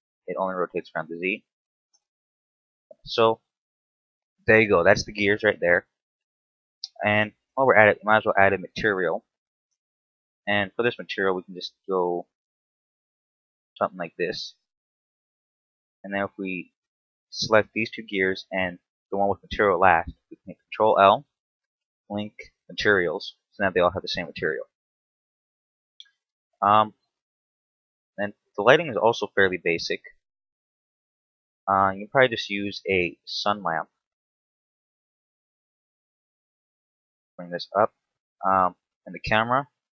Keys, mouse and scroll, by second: 1.6 right click, 2.4 KP_7, 3.2 scroll down 1, 3.9 shift+middle click, 5.0 right click, 6.6 click, 7.8 click, 10.1 click, 14.5 right click, 16.5 shift+right click, 18.7 shift+right click, 20.5 ctrl+l, 26.7 right click, 27.1-27.6 scroll down 4, 27.6-28.3 scroll up 1, 28.5 x, 29.4 shift+a, 34.5 KP_3, 35.2-36.1 scroll down 1, 36.5 click, 38.0 KP_7.